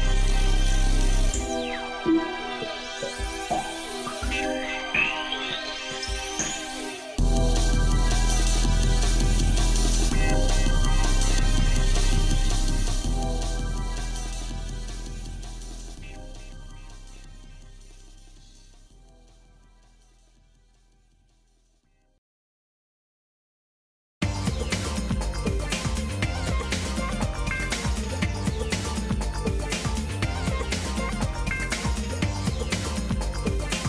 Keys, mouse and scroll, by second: 9.3 scroll down 1, 9.8 Tab, 10.3 shift+middle click, 11.1-11.8 scroll down 3, 12.2 shift+middle click, 12.2-12.5 scroll down 1, 12.9 shift+middle click, 13.6 middle click, 14.2 middle click, 14.7-16.5 shift+middle drag, 16.9 shift+middle click, 17.7 click, 18.6 Delete, 19.2 click, 20.3 shift+d, 23.3 middle click, 24.1 middle click, 26.1 g, 30.4-33.2 shift+middle drag.